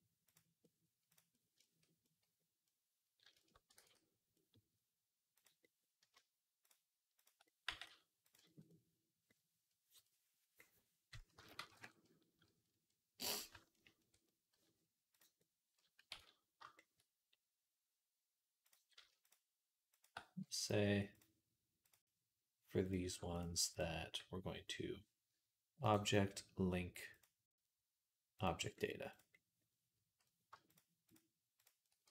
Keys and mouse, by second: 1.0 click, 1.2-6.5 shift+middle drag, 3.7 ctrl+s, 6.5 click, 6.7 shift+middle click, 7.0 shift+click, 7.1 shift+middle click, 7.5 click, 7.5 g, 8.4-18.5 middle drag, 8.5 click, 9.2 g, 11.2 s, 16.3 ctrl+s, 18.5 click, 18.9 shift+middle click, 19.8 shift+click, 19.9-21.7 shift+middle drag, 21.7 click, 21.8-23.6 middle drag, 23.6 shift+click, 23.7-25.7 middle drag, 25.7-29.0 drag, 29.0-30.6 middle drag, 30.6 shift+click, 31.5-32.1 shift+middle drag, 31.9 g.